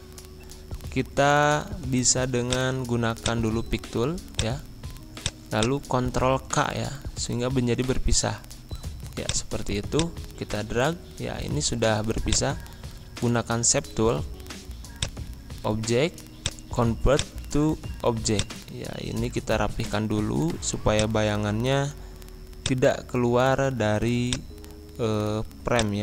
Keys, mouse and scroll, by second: 1.3 ctrl+k, 2.4 click, 6.9 ctrl+z, 8.3 ctrl+k, 9.2 click, 10.7 ctrl+z, 12.2 click, 15.0-26.0 drag.